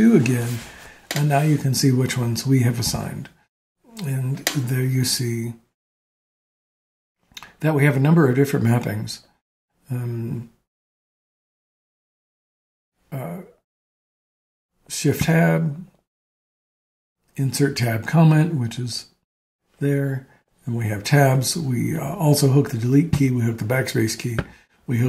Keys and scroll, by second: 0.0-0.2 typing.